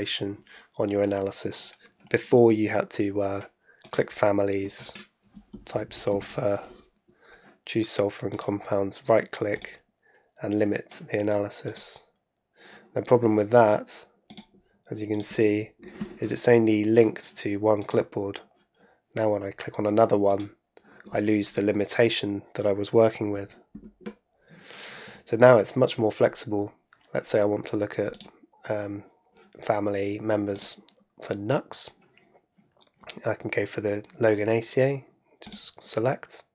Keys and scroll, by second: 5.1-6.8 typing, 15.4 super+F2, 23.7 super+z.